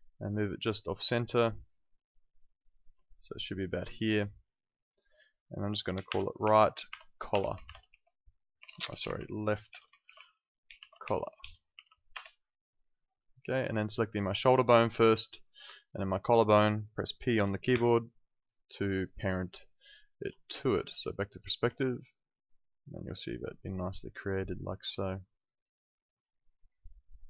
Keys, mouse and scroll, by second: 0.9 click, 4.8 click, 5.8-12.2 typing, 14.4 click, 15.9 ctrl+shift+click, 17.7 p, 19.8 alt+middle click, 20.5 space, 20.6 click, 21.7 alt+click, 23.3 alt+right click, 23.6 alt+click, 24.8 alt+right click, 25.2 alt+middle click, 25.5 alt+right click, 25.7 alt+click, 27.0 alt+middle click.